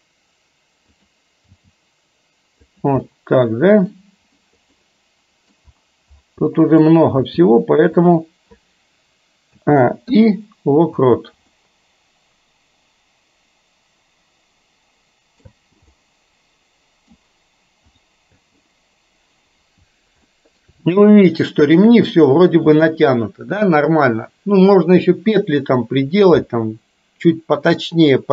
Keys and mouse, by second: 1.6 g, 3.1-4.1 middle drag, 4.9 middle click, 6.6 middle click, 7.2 g, 9.6 a, 10.1 i, 11.1 space, 11.6-15.6 middle drag, 15.6 space, 16.0-17.2 middle drag, 18.0 click, 18.4 space, 20.4 shift+middle drag.